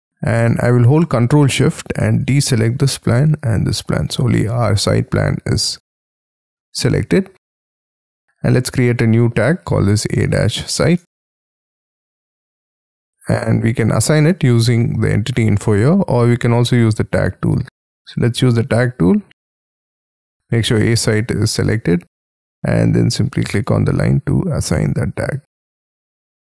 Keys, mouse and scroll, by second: 1.7 ctrl+shift+click, 2.9 ctrl+shift+click, 4.1 ctrl+shift+scroll down 1, 6.3 middle click, 9.7-13.0 typing, 19.8-21.8 scroll up 5, 21.8-23.5 scroll up 17, 24.1-25.4 scroll down 20, 25.4 space.